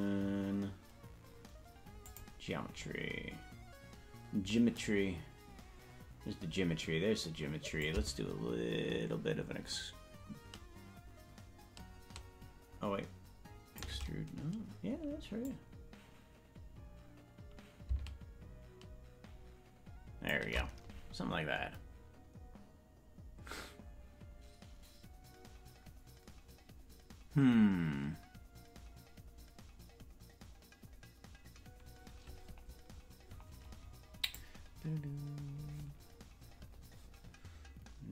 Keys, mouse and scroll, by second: 2.0 click, 7.8-13.9 drag, 15.4-20.4 drag, 34.9 click.